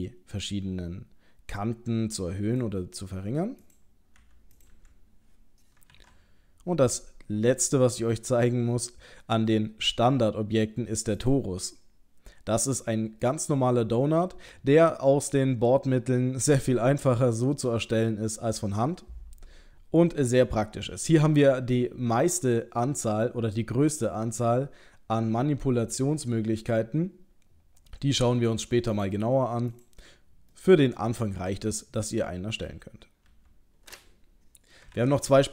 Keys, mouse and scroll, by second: 3.6 click, 4.2 Delete, 4.6 click, 4.7 Delete, 5.9 shift+a, 13.3 middle click, 18.2 middle click, 29.0 click, 29.7 click, 30.5 middle click, 33.3 Delete, 35.0 shift+a.